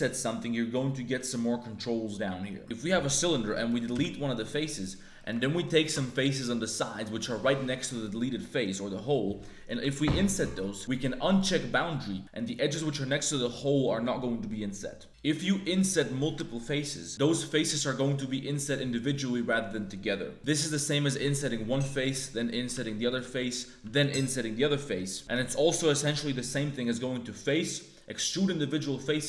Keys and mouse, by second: 2.6 a, 2.6 3, 3.5 click, 3.9 x, 5.1 click, 5.8 ctrl+shift+click, 6.0 click, 6.5 click, 9.8 i, 11.3 click, 11.8 middle click, 12.2 ctrl+z, 15.0 i, 17.1 ctrl+z, 17.1 i, 20.3 click, 20.3 a, 20.3 shift+w, 20.3 3, 21.1 i, 22.1 right click, 22.7 i, 23.8 i, 25.2 ctrl+z, 25.2 a, 25.2 shift+w, 27.3-29.2 drag.